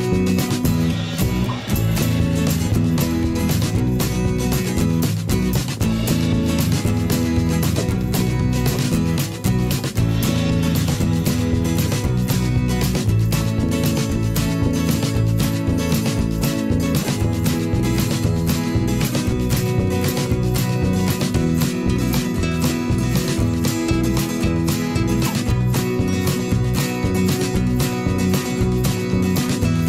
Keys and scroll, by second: 1.1 v, 3.8 ctrl+[, 17.4 v, 26.9 v.